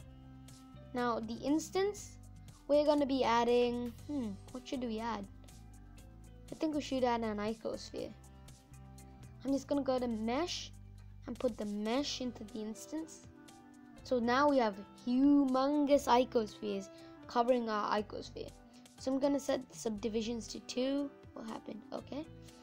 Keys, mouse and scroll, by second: 13.6 click, 14.5-15.3 scroll down 7, 15.3-16.0 scroll up 3, 21.6-22.6 drag.